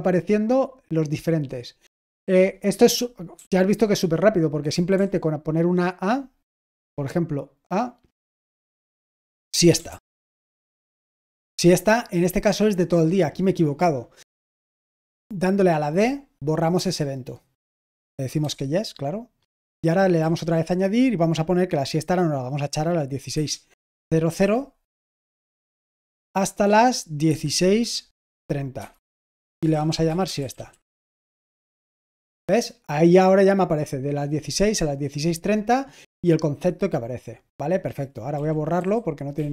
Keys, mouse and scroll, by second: 2.6-3.8 typing, 6.7 a, 8.3 Return, 9.4-11.0 typing, 15.9 d, 16.7 Return, 18.4 y, 20.1 a, 24.1-31.7 typing, 38.3-39.5 typing.